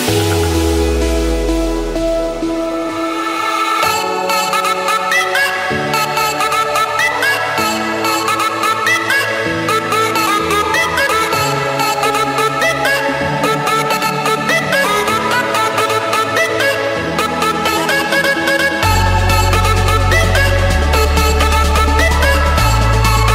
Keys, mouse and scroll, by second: 0.4 Return, 4.9 click, 6.0 click, 6.3-7.0 scroll, 8.4 click, 8.7 scroll, 9.0 middle click, 9.1 middle click, 9.7 Escape, 11.0 c, 11.8 Return, 17.5-18.6 drag, 20.2 2, 20.4 2, 21.0 ., 21.4 5, 22.6 typing, 22.9 Return.